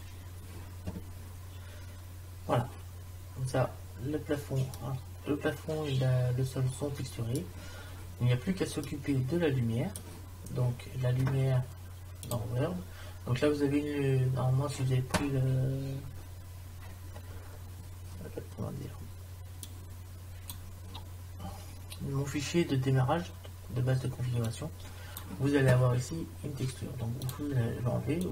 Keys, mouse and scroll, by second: 3.2 middle click, 6.1 middle click, 8.3-9.4 middle drag, 9.8-10.9 middle drag, 17.3-19.3 middle drag, 19.7 click, 24.5-26.2 drag.